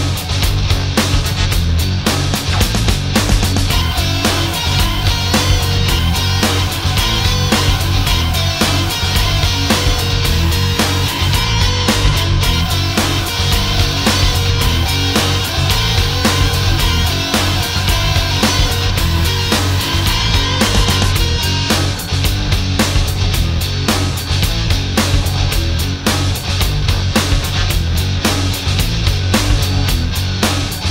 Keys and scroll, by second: 12.1 ctrl+z, 29.1 alt+space.